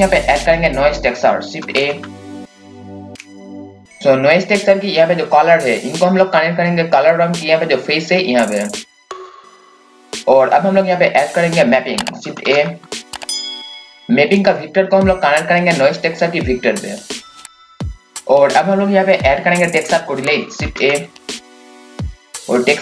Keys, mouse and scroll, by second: 1.7-3.0 typing, 2.1 click, 12.4-13.7 typing, 12.8 click, 13.6 click, 20.6-22.1 typing, 21.0 click, 21.9-22.8 drag.